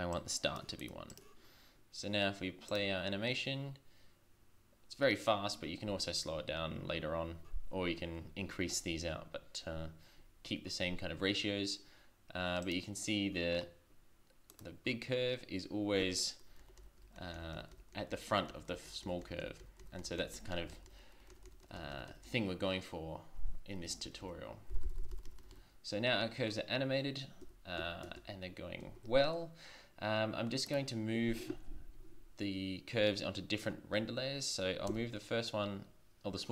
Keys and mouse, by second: 0.8-2.1 middle drag, 12.6-14.5 drag, 16.6 Right, 16.8 Right, 17.0 Right, 17.2 Right, 17.3 Right, 17.6 Right, 17.7 Right, 17.9 Right, 18.1 Right, 18.3 Right, 18.5 Right, 18.7 Right, 18.9 Right, 19.0 Right, 19.2 Right, 19.4 Right, 19.6 Right, 19.8 Right, 20.0 Right, 20.2 Right, 20.3 Right, 20.5 Right, 20.7 Right, 20.9-22.1 Right, 22.3-24.0 Left, 24.2 Left, 24.7 Right, 24.8 Right, 25.0 Right, 25.1 Right, 25.2 Right, 25.4 Right, 25.5 Right, 27.6 z, 27.8 z, 28.8 shift+z, 34.9 m.